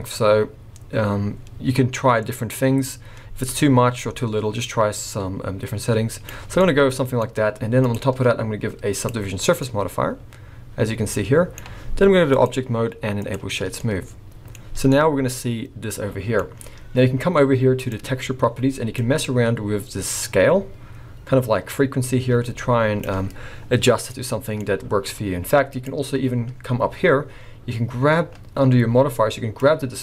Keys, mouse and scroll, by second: 6.6 middle click, 7.8 click, 9.6 middle click, 12.3 click, 13.8 middle click, 14.6-14.9 scroll up 3, 14.9 middle click, 17.8 click, 19.0 click, 24.1 middle click, 24.7-25.7 scroll down 3, 25.7 click, 29.6 click.